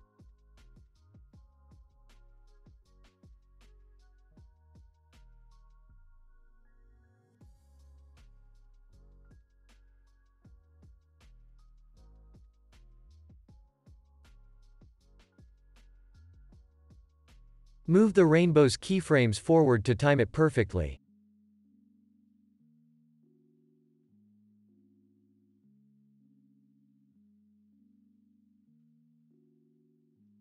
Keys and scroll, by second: 1.6 space, 3.0 ctrl+s, 17.0 ctrl+s, 18.7 F9, 20.3 ctrl+s, 25.1 ctrl+s, 27.5 ctrl+s, 29.7 space.